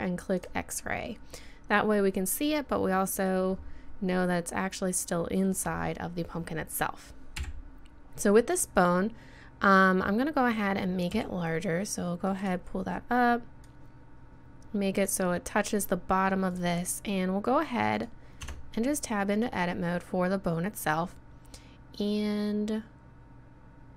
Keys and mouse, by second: 1.4-2.7 drag, 2.7-3.7 middle drag, 4.2-7.7 middle drag, 7.4 KP_1, 11.1 s, 13.6-15.6 drag, 16.5 right click, 18.5 Tab.